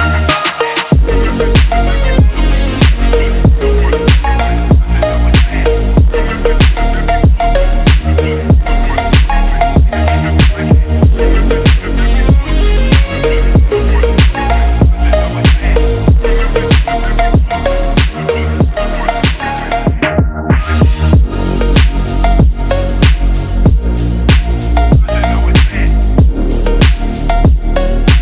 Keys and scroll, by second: 0.3 ctrl+=, 0.5 ctrl+-, 0.6 ctrl+=, 0.7 ctrl+-, 0.8 space, 1.1 ctrl+=, 2.0 Left, 4.2 shift+Right, 6.7 BackSpace, 6.9 BackSpace.